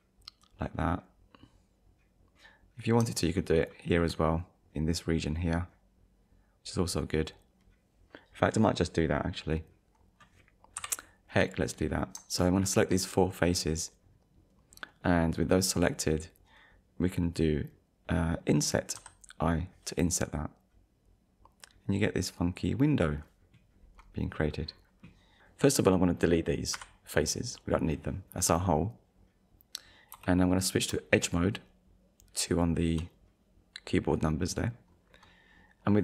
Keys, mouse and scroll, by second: 2.4 click, 2.6 middle click, 2.8 click, 3.2 shift+click, 3.8 shift+click, 10.8 KP_1, 11.7 scroll up 1, 12.6 shift+middle click, 19.0 i, 22.6 click, 26.7 Delete, 27.5 click, 28.2 scroll down 1, 30.1 2, 32.5 alt+click.